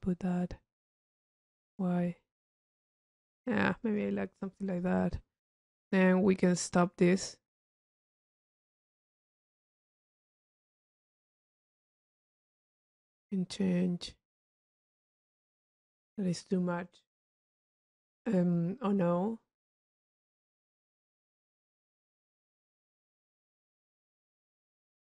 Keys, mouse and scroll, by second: 0.6 click, 4.0 click, 4.9 click, 6.0 click, 6.5 click, 8.9 click, 10.0 click, 11.2 click, 12.6-16.6 drag, 17.3 click.